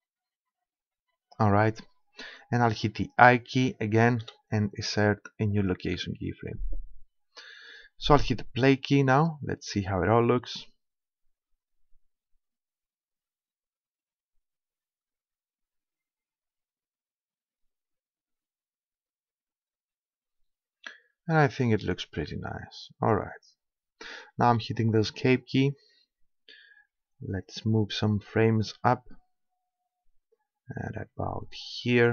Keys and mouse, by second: 4.3 i, 9.2-11.2 drag, 24.5 Escape, 28.2-29.9 drag.